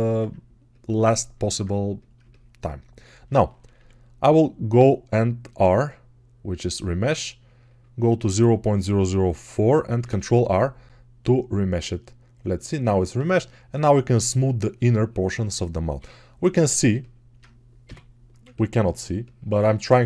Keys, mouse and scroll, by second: 3.6 r, 11.8 ctrl+r, 15.8 /, 17.7 /.